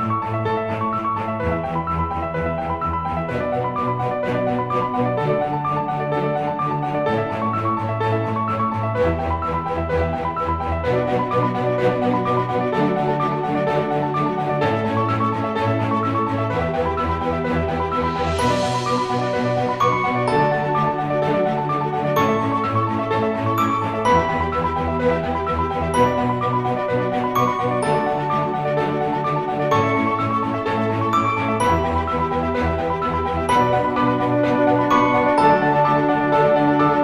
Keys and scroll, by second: 1.4-3.5 typing, 5.0-5.8 typing, 9.7-10.4 typing, 11.6-14.7 typing, 17.8 typing, 20.6 typing, 24.2-37.0 typing.